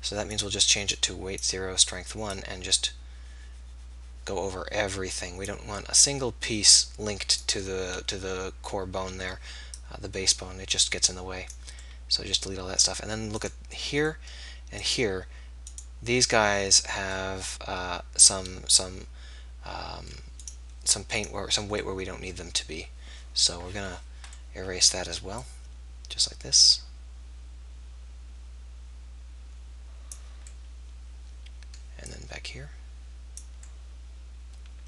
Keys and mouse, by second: 21.8-32.1 middle drag, 32.1-34.8 drag.